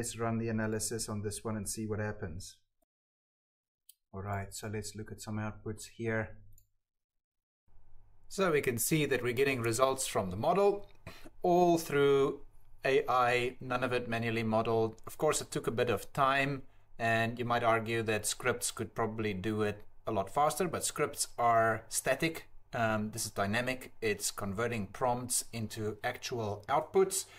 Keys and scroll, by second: 15.9 Tab, 16.1 t.